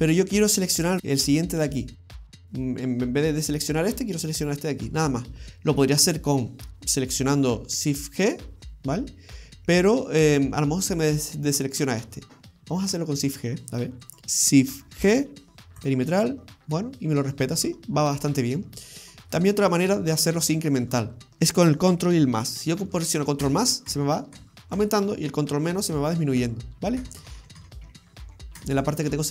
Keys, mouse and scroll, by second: 5.2-8.5 scroll up 2, 14.1 shift+right click, 14.2 ctrl+shift+z, 14.2 shift+d, 15.0 shift+g, 16.8 scroll down 1, 17.0 middle click, 18.5-18.8 scroll up 1, 19.1 middle click, 23.5 ctrl+KP_Add, 23.9 ctrl+KP_Add, 24.4 ctrl+KP_Add, 24.8 ctrl+KP_Add, 25.4 ctrl+KP_Subtract, 25.7 ctrl+KP_Subtract, 26.0 ctrl+KP_Subtract, 26.1 ctrl+KP_Subtract, 26.3 ctrl+KP_Subtract, 27.1 ctrl+KP_Add, 27.2 ctrl+KP_Add, 27.4 ctrl+KP_Add, 27.6 ctrl+KP_Add, 27.8 ctrl+KP_Subtract, 28.0 ctrl+KP_Subtract, 28.1 ctrl+KP_Subtract, 28.3 ctrl+KP_Subtract, 28.6 ctrl+KP_Add, 28.8 ctrl+KP_Add, 28.9 ctrl+KP_Add.